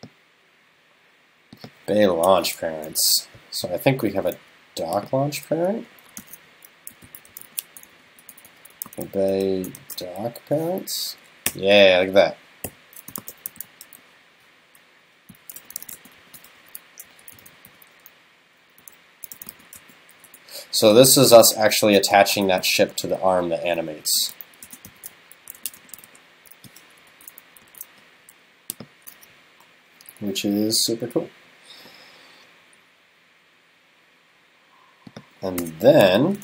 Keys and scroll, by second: 16.6 super+Left, 27.1 super+Right, 27.6 super+s.